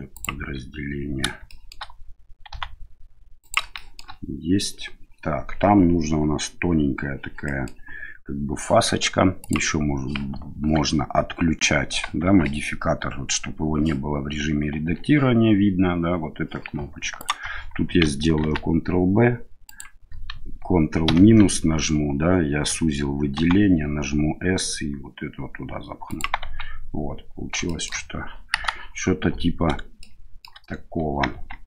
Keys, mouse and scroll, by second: 1.5 shift+middle click, 2.5 s, 3.7 middle click, 7.5 middle click, 9.4 click, 12.2 Tab, 14.7 Tab, 17.1 alt+right click, 18.4 ctrl+b, 23.3 s, 26.4 Tab, 27.6 shift+middle drag, 28.5 KP_1, 30.0-30.4 shift+middle drag, 31.3 Tab.